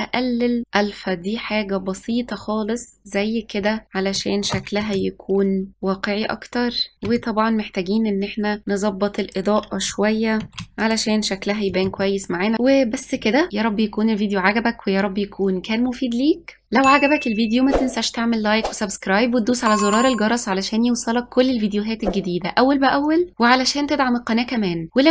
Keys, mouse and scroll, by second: 3.0 click, 5.0 ctrl+s, 5.7-6.1 scroll down 3, 7.0 Left, 7.6 g, 8.4 shift+d, 9.7 g, 11.8 click, 12.3 KP_0, 12.9 ctrl+s, 13.2 click, 13.3 scroll up 3, 13.6 shift+click, 13.7 g, 13.8 middle click, 13.9 click, 14.0 shift+middle click, 14.1 KP_Add, 14.1 middle click, 14.3 ctrl+z, 14.5 middle click, 14.6 middle click, 14.7 middle click, 14.8 scroll down 1, 14.9 middle click, 15.0 middle click, 15.1 ctrl+z, 15.3 s, 15.3 middle click, 15.4 Tab, 15.5 click, 15.5 i, 15.6 shift+middle click, 15.6 ctrl+KP_Add, 15.8 click, 16.1 click, 16.3 click, 16.4 click, 16.6 scroll up 1, 16.6 middle click, 16.6 click, 16.7 click, 16.9 click, 16.9 scroll down 4, 17.0 middle click, 17.2 click, 17.3 middle click, 17.3 click, 17.5 middle click, 17.5 ctrl+z, 17.9 click, 18.1 click, 18.3 scroll down 8, 18.3 click, 18.4 click, 18.7 click, 24.3 g, 25.0 ctrl+z.